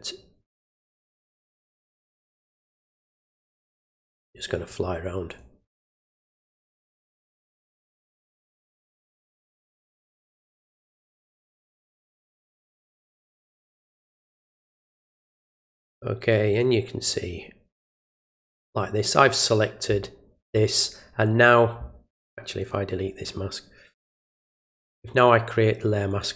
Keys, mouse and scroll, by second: 0.4 click, 1.5 alt+click, 2.0 alt+click, 2.5 alt+click, 3.9 alt+click, 4.5 alt+click, 5.2 alt+click, 5.8 click, 6.4 click, 6.8 alt+click, 7.3 alt+click, 8.1 alt+click, 8.6 alt+click, 9.1 alt+click, 9.6 alt+click, 10.1 alt+click, 10.8 alt+click, 11.4 alt+click, 12.0 alt+click, 12.5 alt+click, 12.9 click, 14.0 click, 15.7 click, 16.5 click, 17.0 click, 18.2 click, 22.5 click, 23.2 right click, 24.5 click, 26.0 click.